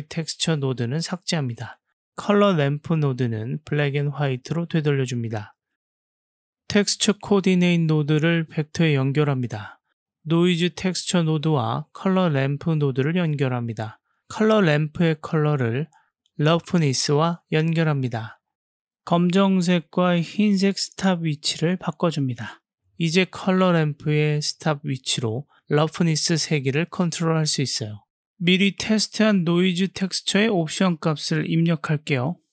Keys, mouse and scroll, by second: 0.5 click, 1.5 Delete, 1.7 BackSpace, 3.2-3.5 drag, 7.7-9.9 drag, 10.6-11.6 drag, 15.2-16.8 drag, 18.7 click, 19.4 click, 20.0-20.6 drag, 21.4-22.5 drag, 25.9-26.8 drag, 29.2 click, 30.5 click.